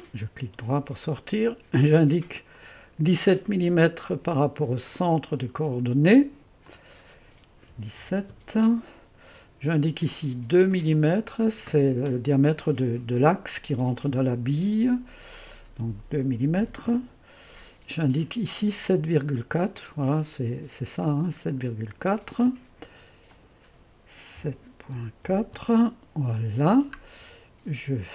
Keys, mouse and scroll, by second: 0.0 click, 2.6 click, 5.0-7.7 drag, 7.8 KP_1, 8.1 KP_7, 8.4 Return, 11.0-12.6 drag, 15.4-16.7 drag, 16.7 KP_2, 17.1 Return, 19.3-20.0 typing, 19.4 click, 22.4-24.1 drag, 24.2-25.3 typing, 25.6 Return.